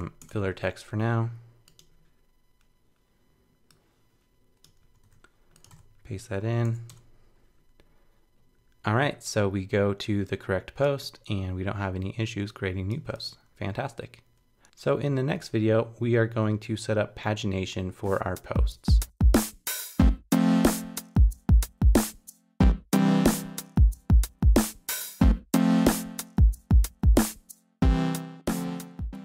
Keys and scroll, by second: 4.8 super+c, 5.0 super+w, 5.7 super+v.